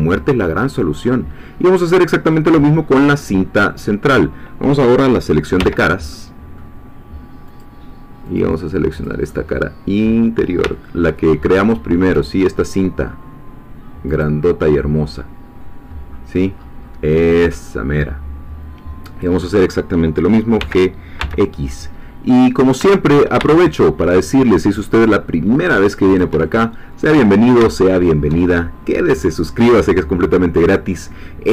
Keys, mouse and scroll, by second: 3.3 scroll up 1, 3.7 middle click, 5.6 3, 6.1 middle click, 7.6 click, 9.1 click, 9.3-10.6 middle drag, 10.7-12.6 ctrl+middle drag, 14.2 click, 14.8-15.8 scroll down 2, 17.4-17.9 scroll down 2, 17.9-19.8 middle drag, 20.6 g, 26.1 shift+click, 26.4-27.7 shift+middle drag, 27.8-29.6 shift+middle drag, 29.6-30.8 scroll up 1, 31.0-31.5 scroll down 1.